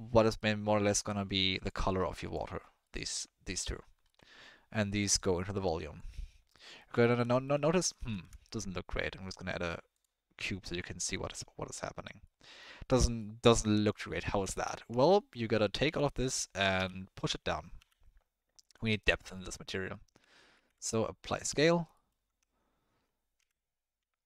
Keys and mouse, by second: 1.8-2.4 drag, 2.8 middle click, 3.1 click, 3.6 middle click, 5.2 click, 6.5 drag, 7.0 ctrl+click, 7.3 click, 7.6 ctrl+click, 8.1 shift+a, 10.8-11.4 drag, 12.2-12.6 drag, 13.2-13.6 drag, 14.4-14.7 drag, 14.7 Tab, 15.0 click, 15.9 e, 18.9 click, 19.5 Tab, 19.7 click, 20.5 ctrl+a, 21.9 click, 22.2 Tab, 23.4 a.